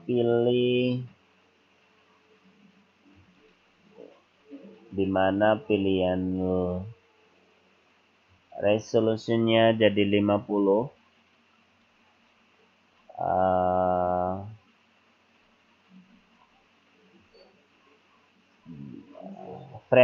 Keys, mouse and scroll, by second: 3.2 click, 5.6 click, 8.3 click, 13.7-14.5 scroll up 3, 15.4-16.8 scroll down 4, 17.3 scroll down 2, 18.6 scroll up 3, 19.8 click.